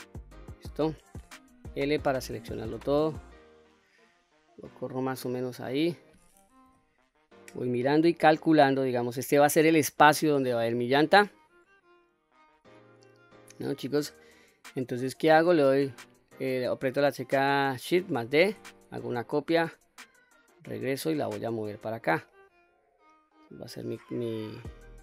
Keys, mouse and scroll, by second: 1.5 l, 3.1-4.8 drag, 5.1-6.6 middle drag, 6.6 KP_3, 18.2 shift+d, 19.4-20.7 right drag, 20.7-23.6 drag, 24.4-25.0 middle drag.